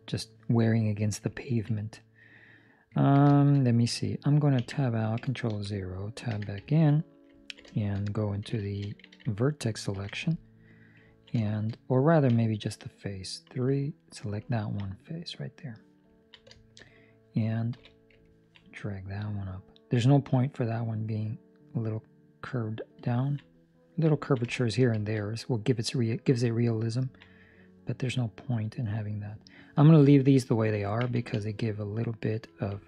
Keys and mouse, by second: 1.3 ctrl+middle click, 1.9 middle click, 2.9 ctrl+middle click, 3.2 shift+middle click, 3.5 middle click, 4.5 Tab, 5.5 ctrl+0, 6.6 ctrl+middle click, 6.9 middle click, 7.3 ctrl+middle click, 7.7 shift+middle click, 10.3 middle click, 11.1 ctrl+middle click, 11.3 shift+middle click, 11.7 middle click, 14.7 ctrl+middle click, 14.8 middle click, 16.1 ctrl+middle click, 16.5 shift+middle click, 16.8 middle click, 17.7 KP_3, 18.3 ctrl+middle click, 19.1 click, 23.1 ctrl+middle click, 23.4 middle click, 24.1 ctrl+middle click, 24.9 shift+middle click, 25.1 middle click, 25.3 shift+middle click, 26.9 ctrl+middle click, 27.2 middle click, 31.3 ctrl+middle click, 31.6 middle click, 32.7 ctrl+2.